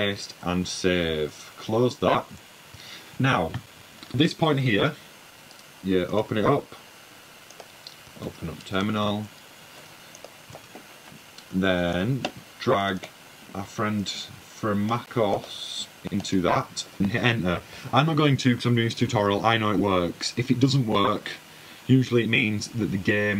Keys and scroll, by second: 0.3 super+v, 0.9 super+s, 2.3 super+w, 3.4 super+`, 4.0 typing, 6.7-7.3 typing, 9.5 shift+super+u, 9.6-12.3 typing, 14.7 typing.